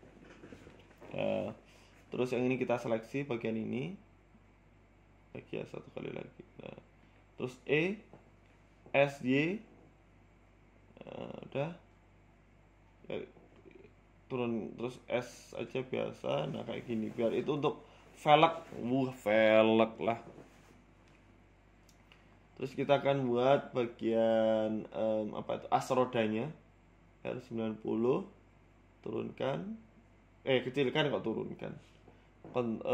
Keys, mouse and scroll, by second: 0.1-0.9 scroll up 3, 0.3 middle click, 0.9 a, 1.1 middle click, 1.4 KP_1, 1.9 shift+middle click, 2.8 alt+shift+right click, 4.3 middle click, 5.3 alt+shift+right click, 5.6 middle click, 6.1 KP_1, 6.5 middle click, 7.6 e, 8.4 s, 10.6 z, 11.1 middle click, 11.6 scroll up 1, 11.8 shift+middle click, 12.4 s, 13.8 KP_1, 14.4 scroll down 2, 14.9 s, 16.1 Tab, 16.2 scroll down 4, 16.4 middle click, 19.9 KP_1, 20.4 scroll up 1, 20.9 scroll down 2, 20.9 scroll down 1, 21.5 shift+a, 22.7 shift+a, 23.5 shift+s, 24.6 Tab, 25.1 Tab, 25.5 shift+a, 27.6 KP_3, 28.4 r, 29.7 s, 31.1 s, 32.1-32.9 scroll up 8, 32.2 shift+middle click.